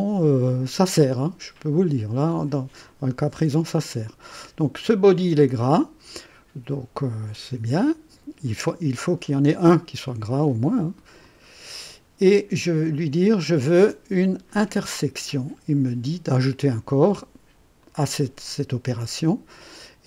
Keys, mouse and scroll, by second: 11.2 click, 13.3 click, 14.4 click, 17.8 click, 18.9 click.